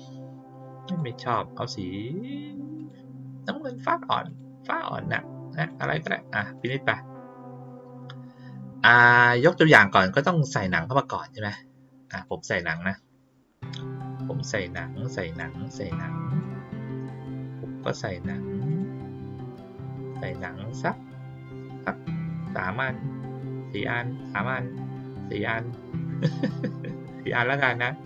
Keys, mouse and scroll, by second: 0.8 click, 2.7 click, 4.2 click, 5.5 click, 6.5 click, 12.1 click, 15.3-16.3 drag, 18.6 click, 20.1 click, 22.2 ctrl+click, 23.6 ctrl+click, 25.9 ctrl+click.